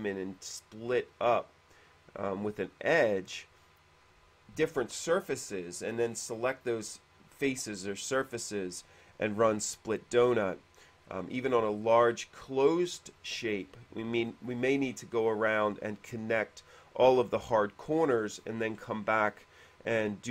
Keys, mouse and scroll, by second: 11.2 middle click, 11.6-12.2 scroll up 1, 12.2 middle click.